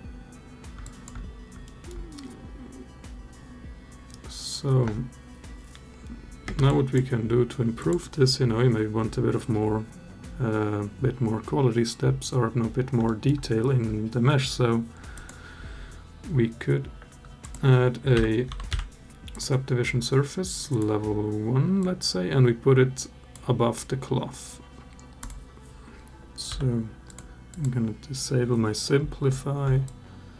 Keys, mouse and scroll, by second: 0.6 alt+drag, 1.4 alt+middle drag, 6.2 space, 6.5 click, 7.6 click, 12.8 alt+middle drag, 15.0-19.2 drag, 20.5 click, 21.6-23.2 drag, 27.3 click, 29.6-30.3 alt+drag.